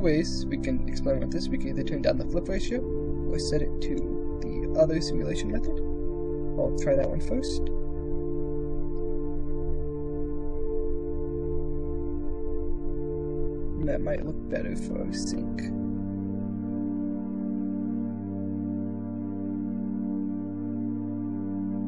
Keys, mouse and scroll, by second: 2.4-3.9 drag, 4.5 middle click, 6.1 ctrl+r, 6.5 shift+space, 12.4-14.5 drag, 16.0-17.8 drag, 17.8 middle click.